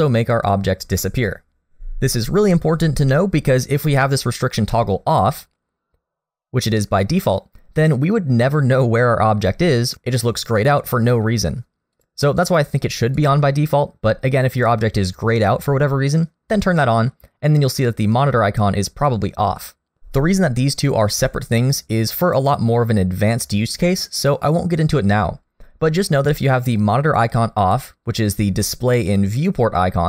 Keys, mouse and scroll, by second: 3.8 click, 12.0 click, 19.6 click, 27.6 click.